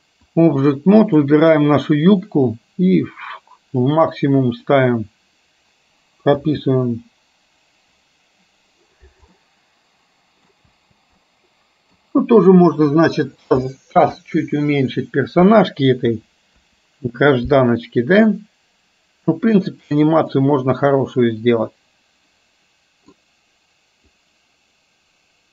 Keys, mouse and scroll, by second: 1.1 click, 3.1 click, 4.8 click, 6.4 space, 9.4-10.7 middle drag, 10.8 space, 11.3-12.1 middle drag, 16.1 KP_2, 18.6-19.9 drag, 20.4-23.2 middle drag, 24.2-25.5 drag.